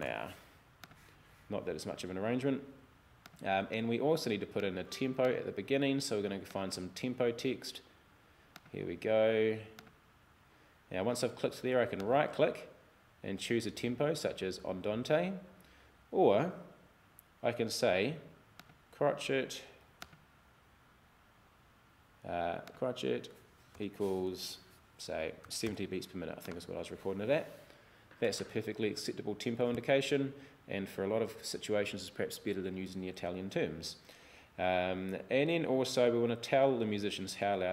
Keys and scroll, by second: 0.0-0.6 typing, 23.8 =, 25.2-26.2 typing.